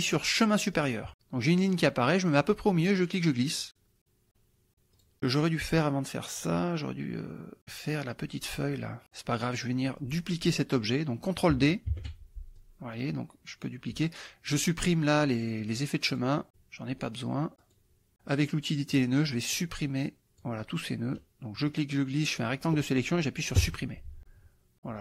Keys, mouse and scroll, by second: 0.8 click, 2.9-4.3 drag, 4.7 click, 5.0 click, 9.0 click, 9.4 middle click, 11.9 ctrl+d, 12.6-13.9 drag, 15.7 click, 16.1 click, 17.6 click, 18.9 click, 19.5-20.6 drag, 21.7 click, 23.6 Delete.